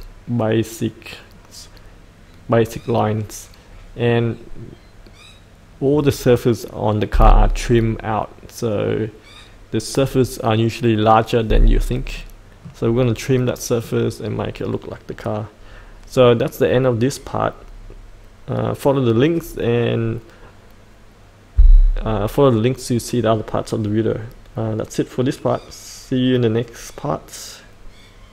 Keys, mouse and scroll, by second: 3.6-12.1 scroll up 1, 12.1-13.2 middle drag.